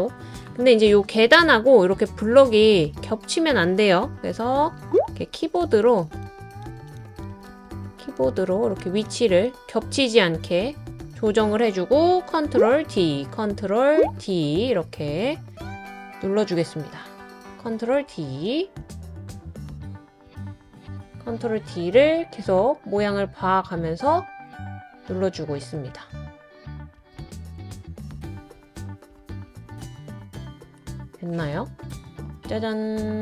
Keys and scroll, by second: 4.2-4.5 scroll up 2, 4.6 Up, 4.8 Up, 5.0 Up, 5.2 Up, 5.4 Left, 5.6 Left, 5.9 Left, 6.1 Left, 6.3 Left, 6.4 Up, 7.0 Left, 7.8 Down, 8.0 Down, 8.2 Left, 8.8 Left, 12.8 super+d, 14.0 super+d, 17.5 super+d, 17.9 super+d, 18.3 super+d, 20.5 super+d, 20.9 super+d, 21.3 super+d, 25.6 super+d, 25.9 super+d, 27.0 super+d.